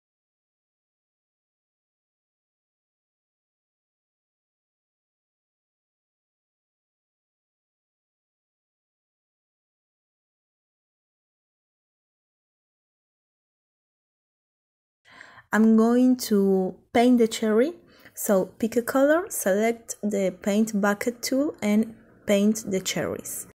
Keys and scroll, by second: 3.6 Delete.